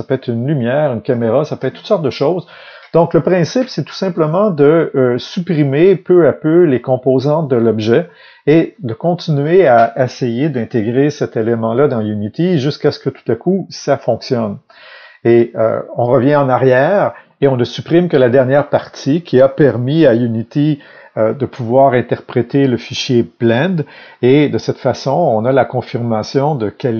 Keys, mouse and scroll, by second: 6.6 click, 8.1 click.